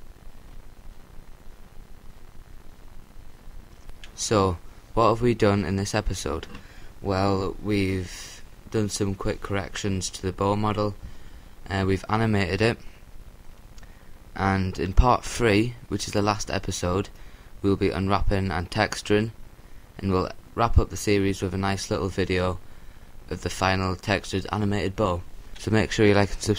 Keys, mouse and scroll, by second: 13.7-16.1 drag.